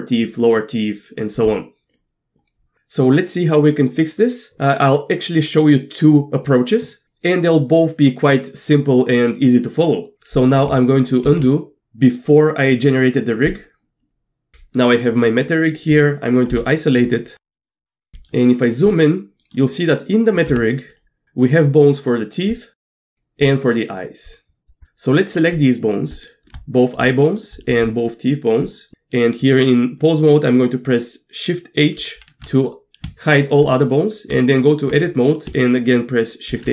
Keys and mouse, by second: 11.3 ctrl+alt+z, 15.3 middle click, 16.5 KP_Divide, 17.6 shift+middle drag, 18.3-18.6 shift+middle drag, 18.6 shift+click, 19.4 middle click, 20.5 Tab, 20.9 drag, 22.8 shift+middle click, 25.2 middle click, 26.1 shift+click, 27.1 shift+middle drag, 27.8 shift+click, 28.7 shift+click, 32.0 shift+h, 34.3 Tab, 36.5 shift+h.